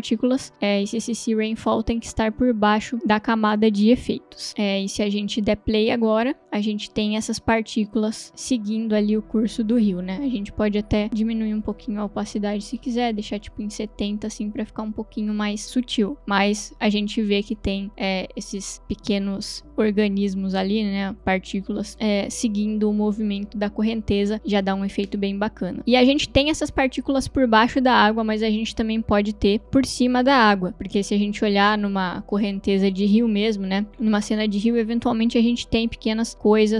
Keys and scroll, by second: 6.4 space, 12.8 0, 13.0 Return, 29.6 space.